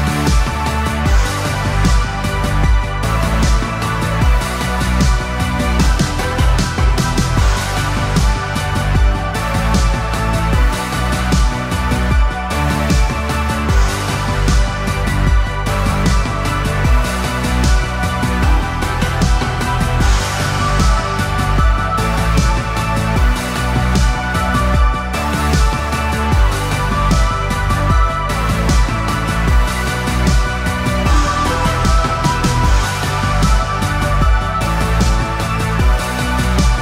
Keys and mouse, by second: 4.0 KP_3, 8.2 c, 11.9 KP_3, 13.3 ctrl+KP_3, 14.9 c, 17.4 g, 27.8 a, 28.1 a, 29.2 c, 33.3 KP_3, 34.7 c.